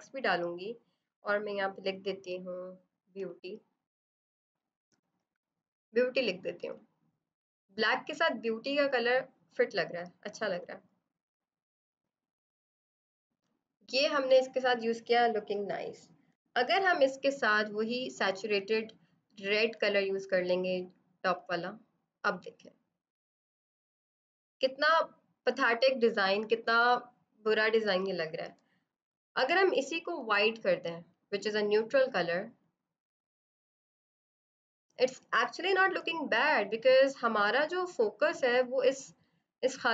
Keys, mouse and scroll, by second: 3.2-5.7 typing, 6.6 click, 12.6 Down, 13.3 click, 16.3 click, 28.9 click, 38.1 click.